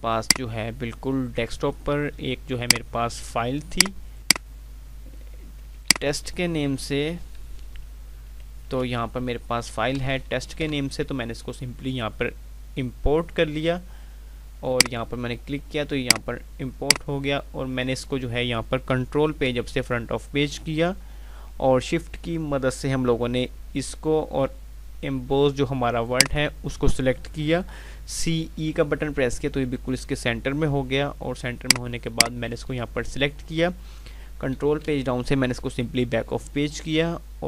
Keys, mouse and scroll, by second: 2.6 click, 5.9 typing, 8.4 typing, 8.6 Down, 10.6 Return, 14.6 click, 16.3-19.9 drag, 19.4 Page_Up, 20.2 shift+Page_Up, 26.0 shift+click, 28.2 c, 31.5 click, 34.5 shift+Page_Down.